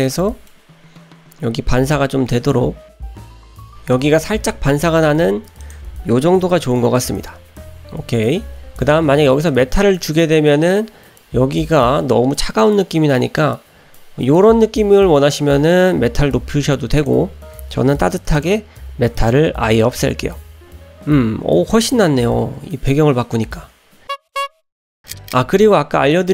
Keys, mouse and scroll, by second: 0.2 middle click, 2.3-3.5 drag, 5.6-7.3 drag, 9.5-10.7 drag, 17.0-18.8 drag, 20.6 click.